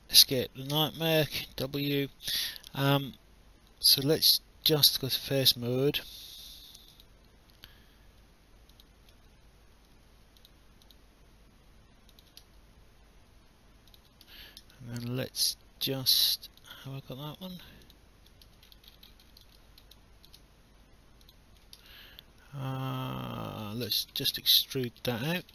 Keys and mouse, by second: 0.7 w, 1.3 alt+click, 2.5 alt+middle click, 4.7 right click, 6.9 click, 8.7 shift+click, 10.4 shift+click, 12.1 shift+click, 13.9 shift+click, 14.7 alt+click, 17.8 shift+click, 19.6 alt+middle click, 19.9 alt+click, 21.2 shift+click, 21.9 alt+click, 24.5 alt+click.